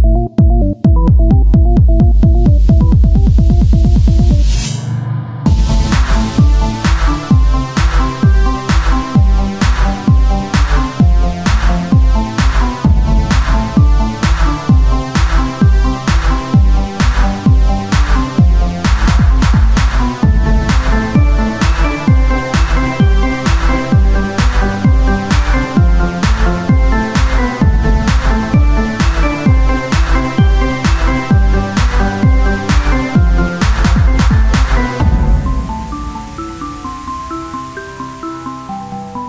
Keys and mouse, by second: 0.3 c, 1.4-4.9 drag, 4.3 z, 6.2 KP_1, 6.6 z, 7.9 z, 9.2 ctrl+Tab, 10.8 c, 14.5 middle click, 15.0 KP_1, 15.8 z, 18.2 e, 19.3 r, 20.5 z, 22.6 ctrl+z, 22.8 ctrl+z, 26.5 click, 26.8 KP_1, 27.2 z, 28.4 s, 30.1 r, 32.3 click, 32.5 e, 34.0 r, 34.9-36.0 drag, 36.0 z, 37.1 ctrl+z, 38.3 ctrl+z.